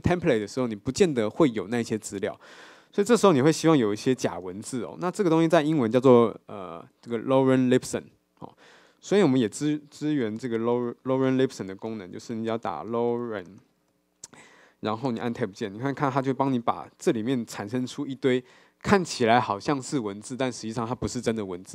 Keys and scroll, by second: 15.5 Tab.